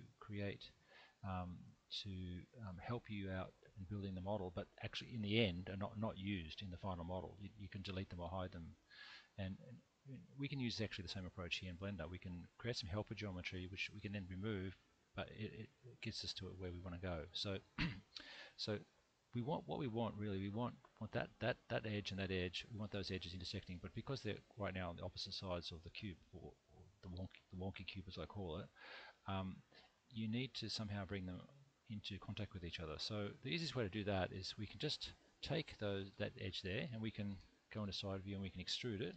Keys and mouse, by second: 10.3-11.9 middle drag, 12.5-13.8 middle drag, 20.4 2, 21.0 click, 22.4 shift+click, 23.8-26.2 middle drag, 30.8-32.8 middle drag, 33.6 1, 34.2 click, 36.3 middle click, 39.1 e.